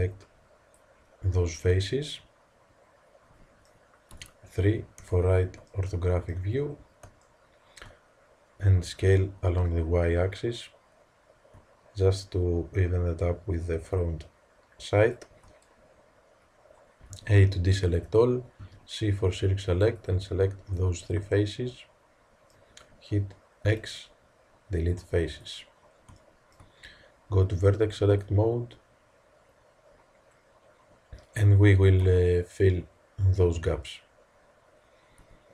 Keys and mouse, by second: 1.5 middle click, 1.9 middle click, 4.1 KP_3, 8.8 s, 17.1 a, 18.5 c, 21.8 click, 22.0 click, 23.6 x, 28.0-30.0 drag, 32.0 z, 35.1 Tab.